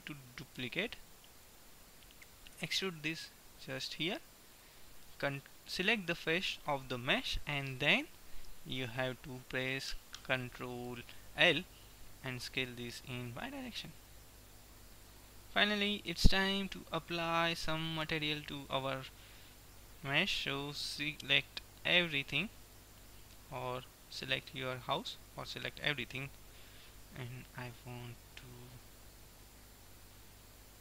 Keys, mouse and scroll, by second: 0.6 shift+d, 2.6 e, 4.6-6.3 drag, 6.3 middle click, 11.1 ctrl+l, 12.3 s, 15.5-18.6 middle drag, 18.6-20.5 drag, 21.0 a, 21.5 a, 22.1 a, 22.6-24.6 right drag, 24.3 ctrl+l, 26.0 a, 26.3 a, 27.3-29.3 middle drag.